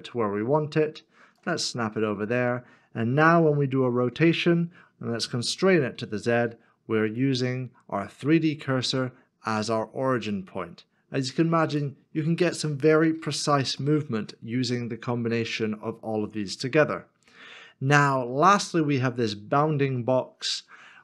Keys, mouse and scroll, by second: 0.5 ctrl+shift+right click, 2.5 middle click, 3.7 r, 12.7 z, 13.8 ctrl+z, 13.8 middle click.